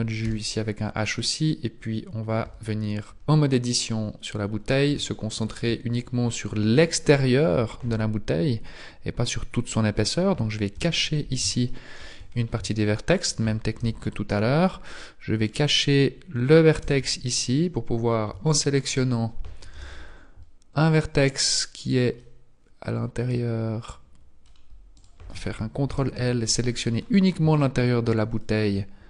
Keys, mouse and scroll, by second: 0.2 h, 1.2 right click, 2.4 Tab, 3.4-3.7 scroll up 2, 4.5-5.1 scroll up 1, 5.1 shift+middle click, 5.1-6.0 scroll up 1, 6.0 scroll up 1, 9.2 alt+right click, 9.2-10.8 scroll up 1, 10.8 h, 11.6 shift+middle click, 12.3-12.8 scroll down 1, 12.8 shift+middle click, 12.8-13.8 scroll down 3, 13.8 z, 14.0-15.4 scroll up 4, 15.4 right click, 16.8 h, 18.0-18.4 scroll down 2, 18.4 shift+middle click, 18.8 shift+scroll up 1, 19.7 z, 20.0 scroll up 1, 22.2 middle click, 24.9 right click, 25.9 ctrl+l, 26.8-27.6 scroll down 5, 27.6 shift+middle click.